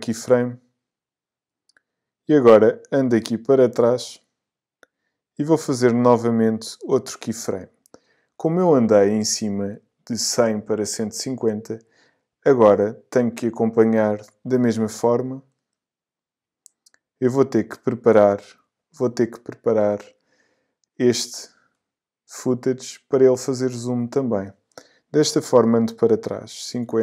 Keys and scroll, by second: 26.8 5.